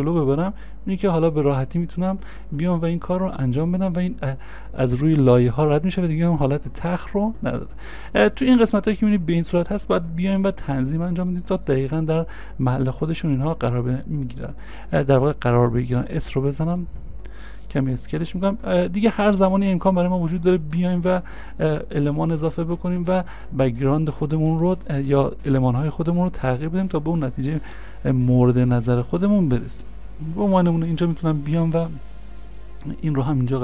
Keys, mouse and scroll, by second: 10.1 c, 10.1 scroll down 1, 12.8-13.5 scroll down 1, 16.0 v, 21.3 s, 23.5 scroll, 23.5 scroll down 1, 27.4-29.0 scroll down 1, 33.2 scroll down 1.